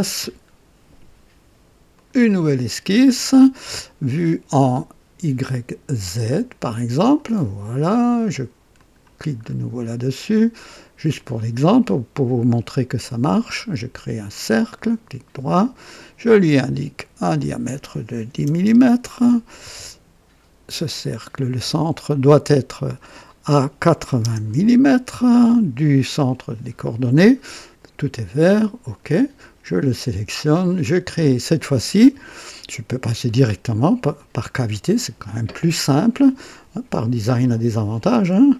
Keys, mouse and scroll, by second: 1.9 click, 6.0 click, 6.9 click, 8.7 click, 9.4 scroll up 2, 11.1 click, 12.9 click, 14.2 click, 14.7 right click, 15.8 click, 17.3 click, 18.3 KP_1, 18.5 KP_0, 18.7 Return, 20.8 click, 22.8 click, 24.0 KP_8, 24.2 KP_0, 24.5 Return, 24.5 Return, 28.1 click, 34.1 click.